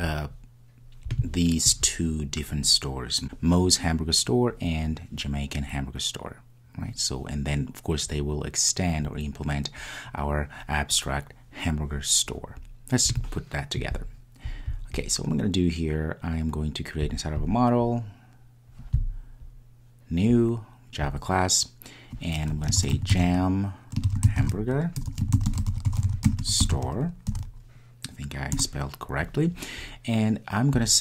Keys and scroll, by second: 20.4 super+d.